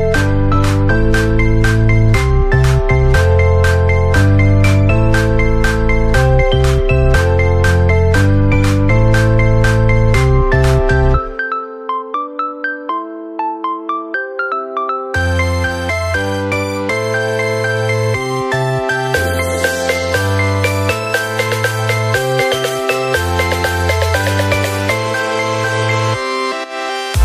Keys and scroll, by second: 0.3 ctrl+z, 2.8 p, 4.1 ctrl+-, 24.0 ctrl+z.